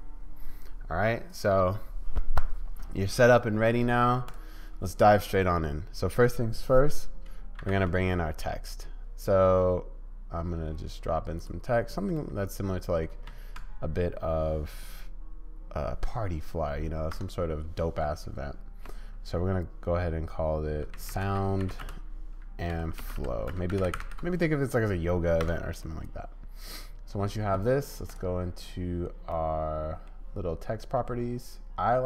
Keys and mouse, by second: 7.6 shift+a, 12.2 middle click, 17.1 Tab, 18.1-18.8 BackSpace, 20.9-24.0 typing, 25.4 Tab, 25.8-28.5 drag, 28.5 middle click, 29.3 click, 30.1-32.0 middle drag.